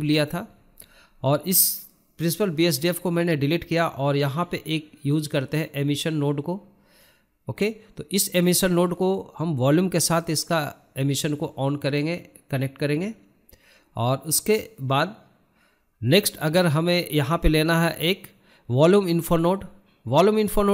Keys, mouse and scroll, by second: 0.3 scroll up 1, 0.4-2.5 shift+middle drag, 2.5 click, 9.8 click, 10.2 scroll up 3, 10.9 shift+middle click, 11.5-13.3 shift+middle drag, 14.3 click, 15.1 click.